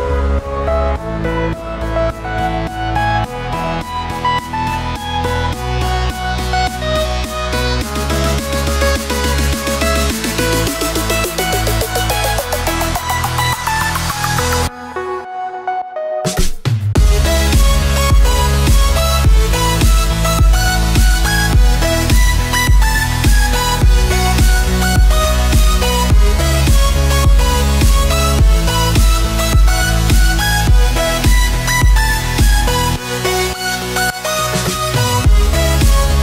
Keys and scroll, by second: 3.0 alt+a, 8.7 alt+a, 12.8 alt+a, 24.6 alt+a.